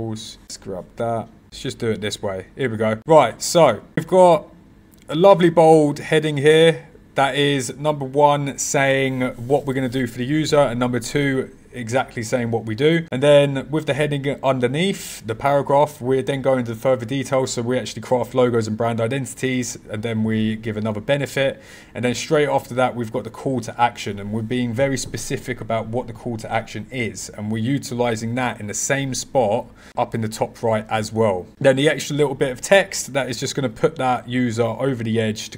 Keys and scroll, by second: 0.4 super+g, 1.4 super+\.